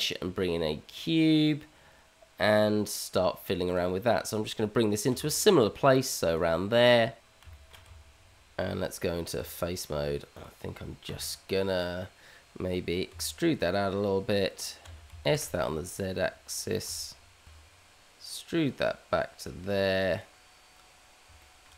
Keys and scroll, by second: 5.1 g, 7.8 Tab, 13.1 e, 14.8 s, 17.4 e.